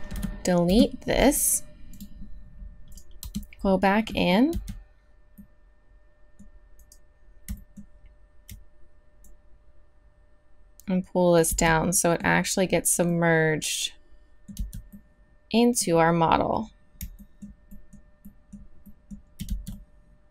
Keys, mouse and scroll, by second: 0.1 x, 1.9-3.6 drag, 3.2 Tab, 4.2 click, 4.5 z, 6.8 right click, 9.2-11.4 drag, 11.5 z, 14.5 z, 19.5 z.